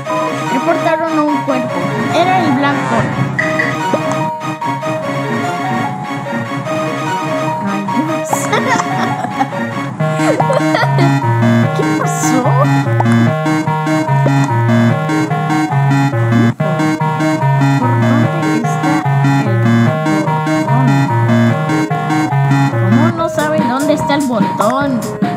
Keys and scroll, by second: 1.5 space.